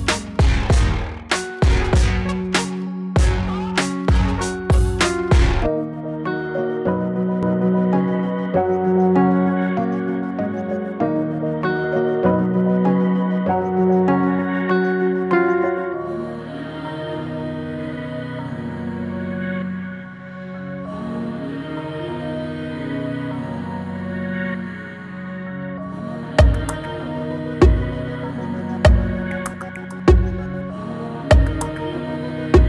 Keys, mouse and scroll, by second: 0.5 shift+Right, 4.5-9.7 drag, 9.7 shift+Right, 11.0 click, 11.6 shift+Right, 12.4 click, 13.1 shift+Right, 13.7 click, 14.5 shift+Right, 15.1 click, 15.7 shift+Right, 16.2-17.3 drag, 17.3 shift+Right, 17.9 click, 18.4 shift+Right, 19.0-24.7 drag, 24.7 space, 30.8 space, 31.7-32.6 shift+drag.